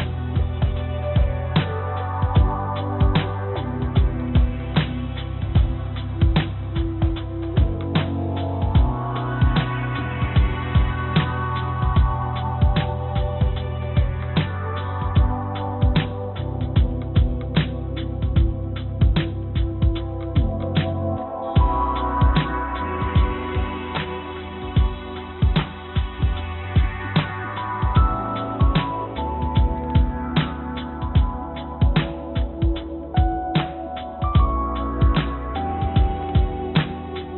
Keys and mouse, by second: 0.0 ctrl+z, 0.8 e, 4.5 click, 5.2-8.8 drag, 10.1 shift+click, 11.1 i, 15.2 e, 17.3 i, 19.2 e, 28.1 click, 30.7 e, 32.1-36.6 drag, 36.7 click.